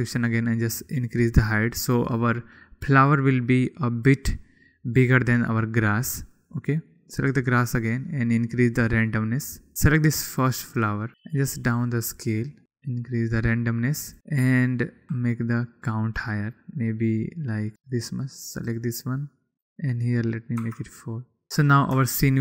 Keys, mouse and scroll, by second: 1.1-2.9 drag, 3.3 middle click, 4.4-5.0 middle drag, 8.0 click, 9.4 click, 10.4 click, 12.1 click, 13.1-14.4 drag, 15.0 click, 17.3 click, 17.7 middle click, 18.7 middle click, 21.6 middle click.